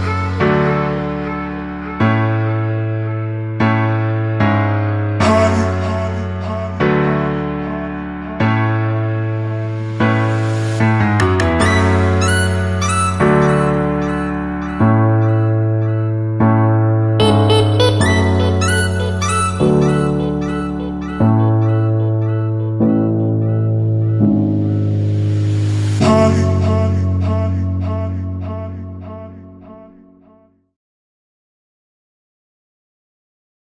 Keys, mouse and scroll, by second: 2.1 ctrl+z, 3.4-5.8 scroll up 1, 5.8 click, 7.6 ctrl+s, 8.6-13.1 scroll down 1, 13.1-16.5 scroll up 1, 16.7 click.